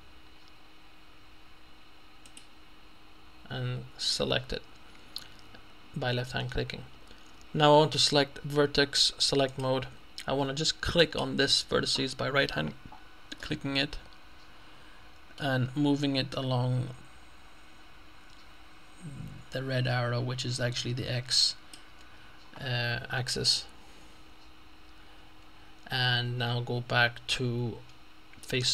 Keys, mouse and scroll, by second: 2.3 click, 9.5 click, 11.0 right click, 13.4-15.9 middle drag, 16.4-22.3 drag.